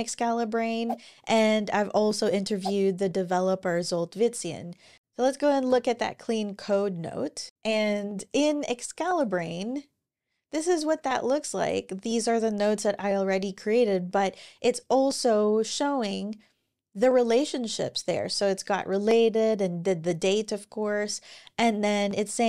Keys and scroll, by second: 5.0 Down, 5.0 typing, 5.4 Return.